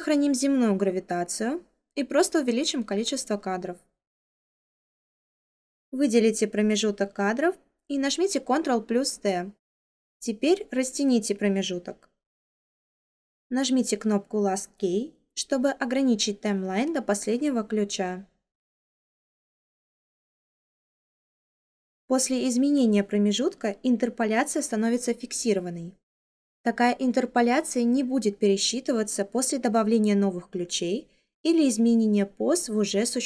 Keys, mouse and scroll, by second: 8.4 ctrl+t.